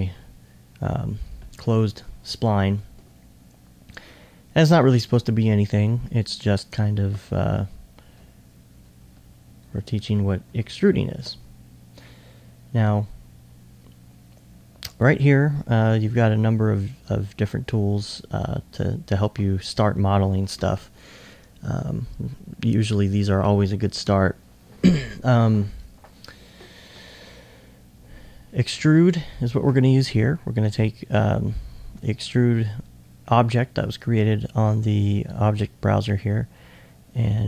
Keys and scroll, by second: 8.1-9.9 typing, 11.1 alt+2.